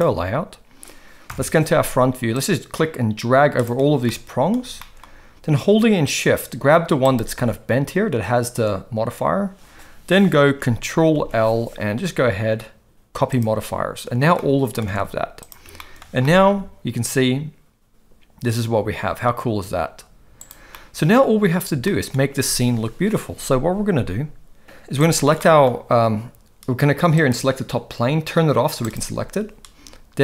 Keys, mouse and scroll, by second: 1.3 KP_1, 2.5-3.6 drag, 4.0-4.5 middle drag, 4.8 shift+middle drag, 11.1 ctrl+l, 14.4-14.8 middle drag, 14.8 alt+a, 15.4 click, 15.8 shift+middle drag, 16.2 middle click, 16.6 g, 20.7-21.2 middle drag, 21.9 shift+middle drag, 25.4 middle click, 27.2 click, 28.8 click.